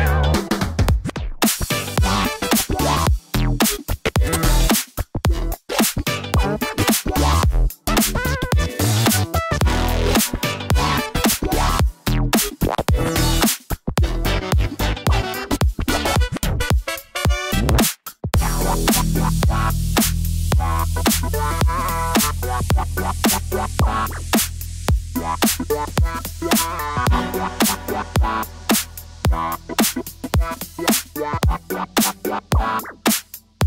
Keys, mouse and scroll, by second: 6.9 click, 8.1 click, 9.1-10.1 drag, 10.9-12.8 middle drag, 13.3 Tab, 17.5 r, 17.9 x, 18.6 click, 20.8 click, 21.3 g, 21.4 y, 22.7 click, 23.1 g, 23.4 z, 25.2 click, 25.9 g, 26.0 y, 26.4 click, 26.9-27.3 middle drag, 27.3-27.7 drag, 28.6 click, 29.8 g, 29.9 y, 30.5 z.